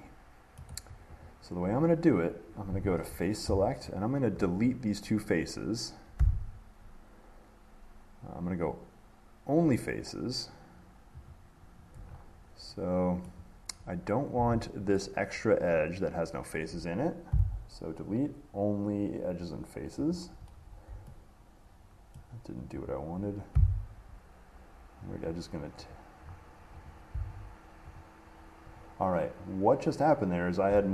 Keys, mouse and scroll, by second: 0.8 middle click, 1.4 click, 3.4 click, 4.2 shift+click, 11.5 click, 12.3 click, 12.4 middle click, 12.4 middle click, 12.9 middle click, 13.5 middle click, 15.1 click, 20.4 click, 20.8 middle click, 20.8 middle click, 21.3 middle click, 22.4 middle click, 23.1 click, 25.5 click, 26.5 middle click, 26.5 middle click, 26.6 middle click, 27.1 click, 28.2 click.